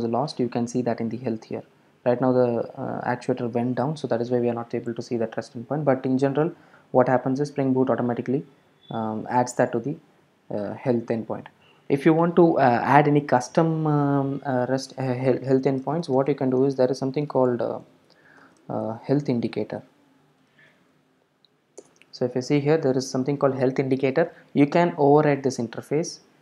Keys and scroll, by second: 16.3 shift+super+n, 18.6 super+o.